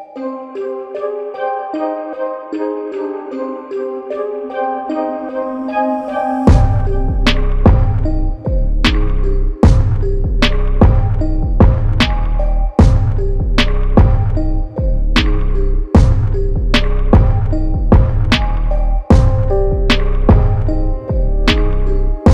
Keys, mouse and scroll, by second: 4.4 Tab, 5.7 click, 6.1 Tab, 7.7 click, 8.8 Tab, 10.8-11.5 typing, 11.4 shift+Tab, 13.4 click, 14.3 typing, 14.9 click, 17.2 typing, 18.5 click, 20.5 Tab.